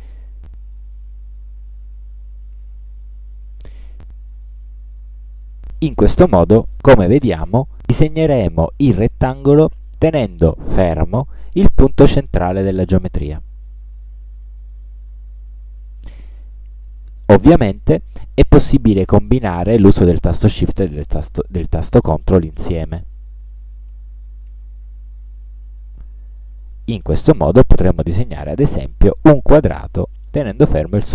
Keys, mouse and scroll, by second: 16.6-18.0 drag, 20.6 click, 21.4 ctrl+scroll down 2, 22.4 ctrl+scroll up 2, 25.6-31.1 ctrl+shift+drag.